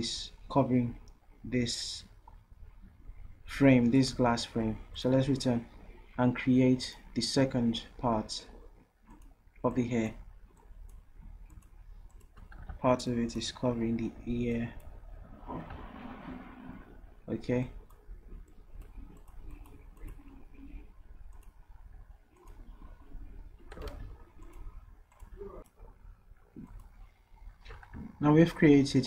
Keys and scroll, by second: 12.7 ctrl+z, 23.9 ctrl+z.